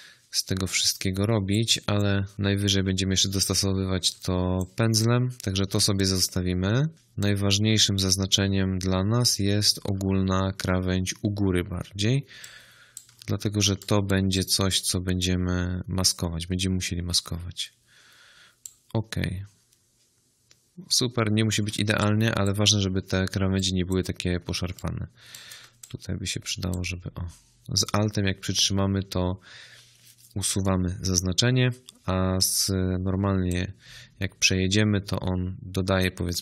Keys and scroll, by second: 3.0 space, 5.5 space, 9.9 space, 21.6 space.